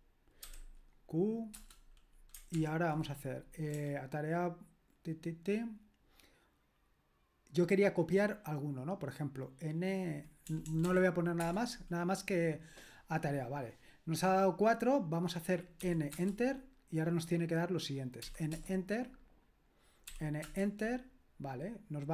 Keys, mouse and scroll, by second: 0.4 q, 1.5 Return, 2.6 ctrl+p, 3.7 BackSpace, 10.4 BackSpace, 10.6 BackSpace, 10.8 BackSpace, 11.4 Return, 15.8 n, 16.1 Return, 18.2-18.5 typing, 20.1-20.4 typing.